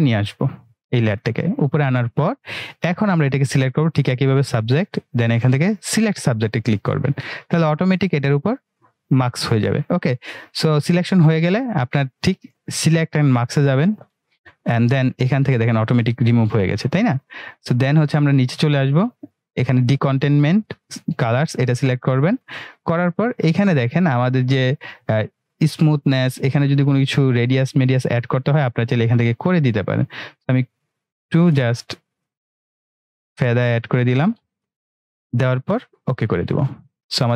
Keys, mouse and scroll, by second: 13.5 click, 18.9-19.5 drag, 27.1-29.3 drag.